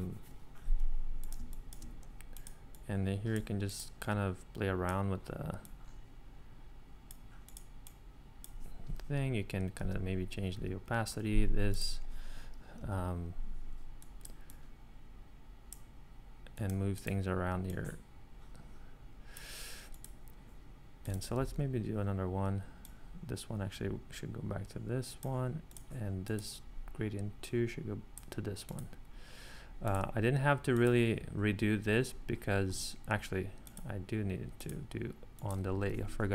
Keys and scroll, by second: 1.4 space, 9.9 5, 10.5 4, 12.8 3, 21.4 super+d, 36.0 1.